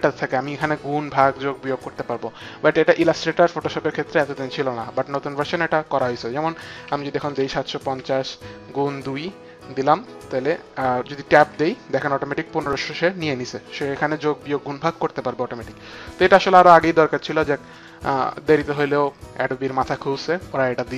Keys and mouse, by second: 6.7 KP_7, 7.2 KP_5, 7.2 KP_0, 9.4 KP_2, 9.4 KP_0, 9.4 KP_5, 9.4 KP_7, 11.2 Tab, 17.6 click.